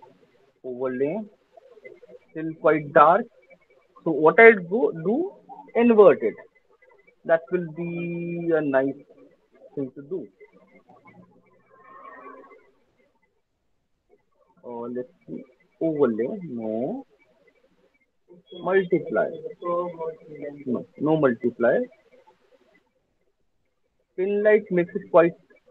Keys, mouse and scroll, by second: 1.5 click, 2.0 click, 5.9 click, 10.5 click, 12.0 click, 12.7 click, 15.8 click, 18.8 click, 19.9 click, 20.4 click, 21.8 click, 25.2 click.